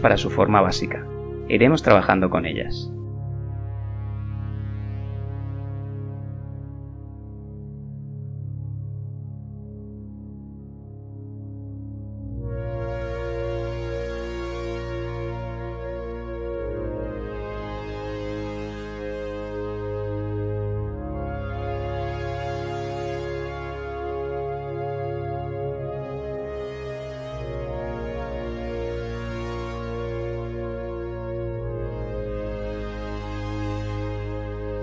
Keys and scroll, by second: 5.3 s, 10.8 g, 16.3 e, 25.3 e.